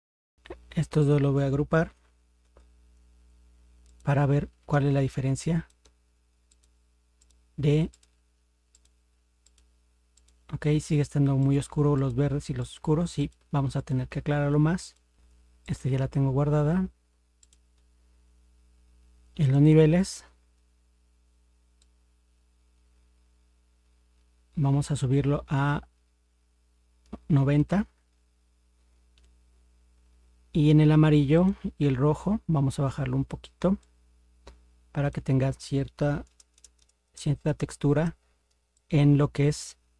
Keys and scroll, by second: 2.5 ctrl+g, 36.3 ctrl++.